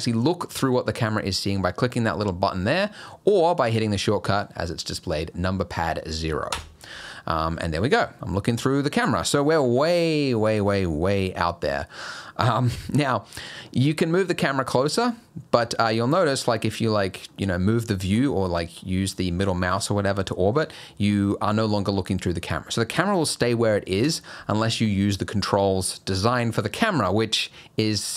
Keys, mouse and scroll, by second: 6.5 KP_0, 15.5-15.9 scroll up 4, 15.9 scroll down 3, 16.2-17.3 scroll up 3, 17.3 middle click, 20.3 middle click, 20.6 scroll down 3, 23.9 KP_0, 24.8-26.0 scroll down 2.